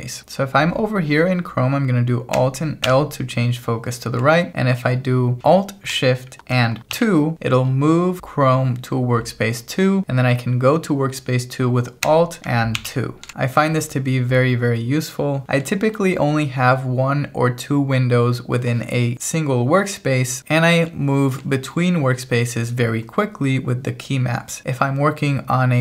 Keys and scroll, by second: 2.9 alt+l, 7.0 alt+shift+2, 12.8 alt+2.